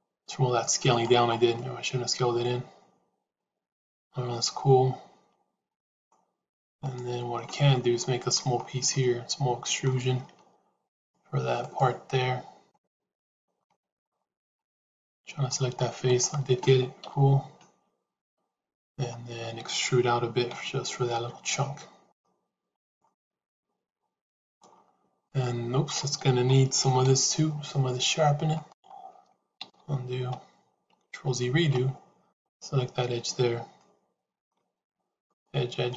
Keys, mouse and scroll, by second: 1.4-6.0 middle drag, 6.7 click, 7.3 middle click, 7.9 shift+middle click, 8.9 middle click, 10.8 click, 12.5 click, 13.5 middle click, 14.1 shift+middle click, 14.9 middle click, 15.9 click, 16.9 KP_1, 18.1 KP_Decimal, 20.5 e, 22.9-24.5 middle drag, 25.2 middle click, 26.9 shift+e, 29.7 ctrl+z, 31.3 ctrl+shift+z, 32.2 click, 33.7 middle click, 35.2 click, 35.8 click.